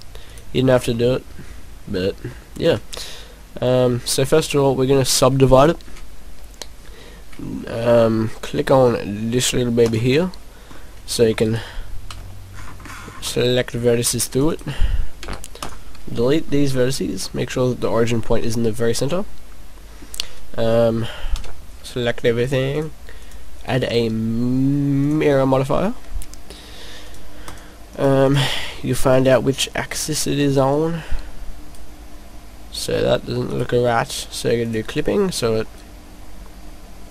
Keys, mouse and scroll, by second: 0.4 click, 1.0 middle click, 1.7 middle click, 2.2 middle click, 5.5 click, 9.8 click, 10.8 middle click, 11.5 right click, 12.2 c, 14.5 right click, 15.2 Delete, 16.1 scroll down 1, 16.8 scroll up 1, 16.9 scroll down 1, 17.2 middle click, 18.4 middle click, 21.3 a, 22.4 click, 22.9 click, 23.2 click, 27.0 click, 27.5 click, 28.2 click, 28.4 click, 30.7 click, 30.7 right click, 31.1 right click, 33.5 right click, 34.6 click, 35.6 click, 35.8 right click, 35.8 right click.